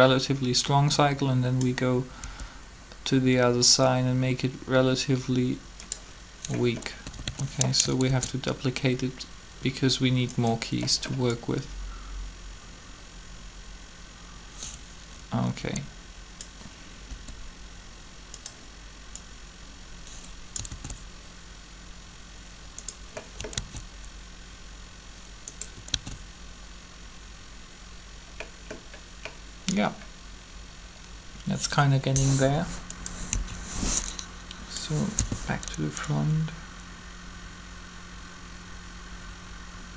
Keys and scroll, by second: 2.2 r, 6.9-8.1 typing, 17.0 r, 20.7 alt+a, 23.5 alt+a, 25.8 alt+a, 33.3 3, 35.1 1.